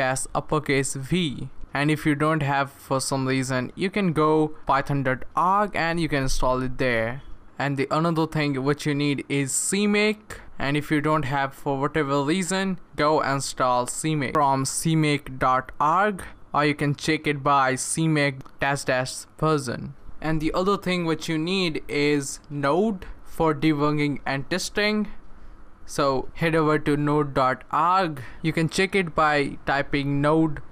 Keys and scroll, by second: 0.0-0.8 typing, 1.4 Return, 16.2-18.9 typing.